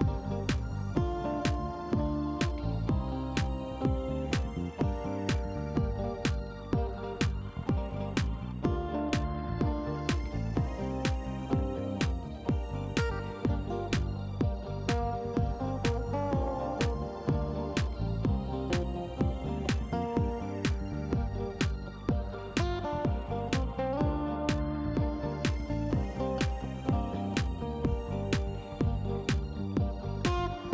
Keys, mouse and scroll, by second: 0.1 scroll up 1, 0.3 middle click, 3.2 click, 3.9 click, 5.2 click, 5.8 right click, 6.2 middle click, 8.0 click, 8.7 click, 9.0 space, 11.1 click, 12.7 click, 14.4 middle click, 16.3 click, 17.8 click, 19.1 click, 20.4 click, 23.3 click, 24.3 Delete, 26.0 click, 29.1 click, 30.4 KP_8, 30.6 KP_Enter.